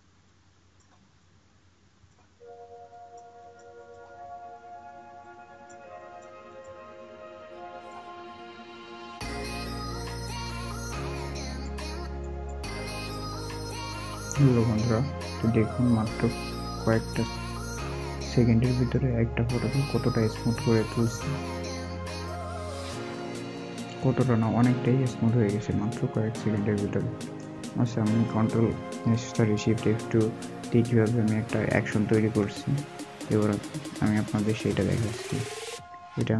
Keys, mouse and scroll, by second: 3.3 double click, 4.1 scroll up 1, 6.8 scroll up 1, 6.9 double click, 8.0-8.4 scroll up 1, 12.2 double click, 14.8-15.1 alt+scroll down 1, 15.8 alt+scroll up 1, 18.6 double click, 19.3 alt+scroll, 19.3 alt+scroll up 1, 22.8 alt+scroll down 1, 25.1 alt+scroll up 1, 25.4-25.8 alt+scroll down 1.